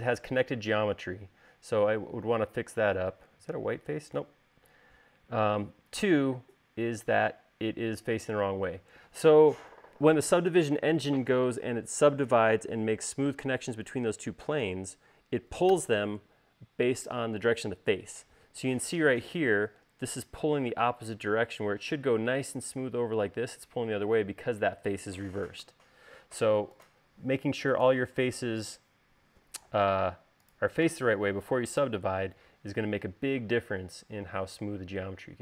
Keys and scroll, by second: 26.5 u, 32.7 u.